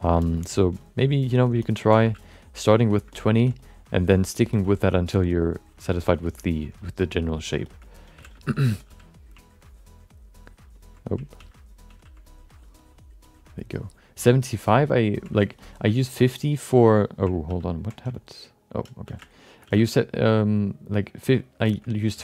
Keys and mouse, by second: 0.2 alt+shift+middle click, 0.2 alt+shift+right click, 0.3 alt+middle click, 0.8 click, 1.6 alt+middle click, 1.6 alt+right click, 2.1 f, 2.2 click, 3.1 middle click, 3.1 right click, 3.3 middle click, 3.6 click, 4.5 alt+shift+middle click, 4.6 middle click, 5.1 click, 5.9 alt+shift+middle click, 6.4 middle click, 6.8 click, 7.6 shift+middle click, 7.8 alt+middle click, 8.2 f, 8.3 alt+shift+middle click, 8.5 alt+middle click, 8.8 f, 9.6 ctrl+click, 10.7 ctrl+click, 11.6 ctrl+z, 12.1 ctrl+z, 12.3 click, 12.7 click, 13.2 click, 14.3 ctrl+click, 15.4 alt+shift+middle click, 15.6 alt+middle click, 16.2 ctrl+click, 17.7 ctrl+z, 18.1 alt+middle click, 19.0 f, 19.2 shift+click, 19.4 shift+click, 19.6 f, 19.9 click, 20.7 click, 21.6 shift+middle click, 21.8 alt+middle click.